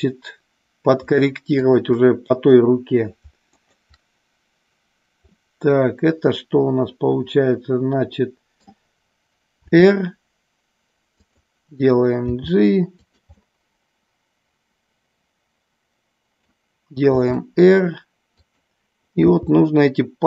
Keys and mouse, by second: 1.5-2.5 shift+drag, 3.5-4.6 shift+drag, 5.4-8.6 middle drag, 9.5 r, 11.3 click, 12.4 g, 12.9 click, 13.4-16.4 middle drag, 17.1 r, 18.4 click, 19.2 g.